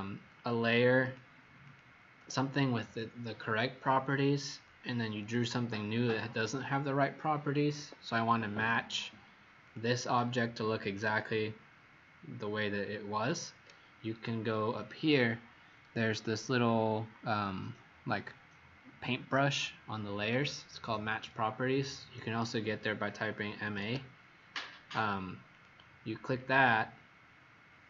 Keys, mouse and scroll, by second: 1.6 click, 3.7 Escape, 5.2 click, 7.7 Escape, 9.6 click, 10.9 Escape, 23.4-24.2 typing, 25.4 click.